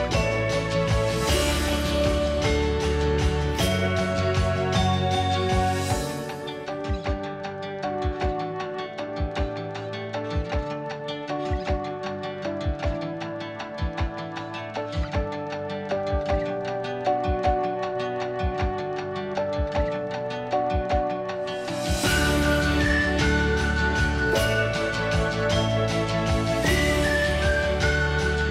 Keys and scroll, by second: 2.1 ctrl+g, 3.6 ctrl+h, 6.5 Delete, 8.0 h, 10.1 m, 13.5-14.8 typing, 15.6 Delete, 16.4 Delete, 17.6 Delete, 18.7 Escape, 18.8 Escape, 19.0 Escape, 19.1 h, 25.3 h.